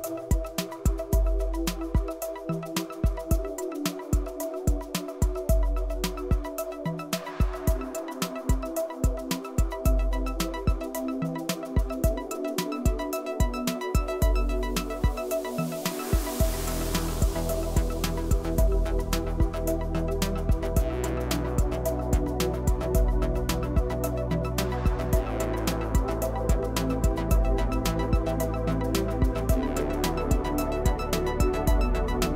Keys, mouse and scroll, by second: 1.0 click, 1.2 Tab, 1.5-3.5 middle drag, 3.5 Tab, 3.7-4.3 scroll up 2, 4.3 ctrl+r, 5.8 ctrl+r, 7.7 ctrl+r, 8.5 Tab, 8.6 click, 8.9-9.3 middle drag, 9.3 scroll down 1, 9.5-10.0 middle drag, 10.0 scroll down 1, 10.2-10.6 middle drag, 10.6 click, 11.2-12.4 drag, 12.8-14.3 middle drag, 14.5 scroll down 1, 14.6 Tab, 14.8 click, 16.0 g, 18.9 click, 19.1 click, 19.3 click, 20.2 g, 22.3-23.5 middle drag, 23.5 Tab, 23.6 click, 23.8 click, 24.7 click, 25.1 click, 25.3 click, 25.6-26.6 middle drag, 26.6 click, 28.4 click, 28.9 click, 29.3 click.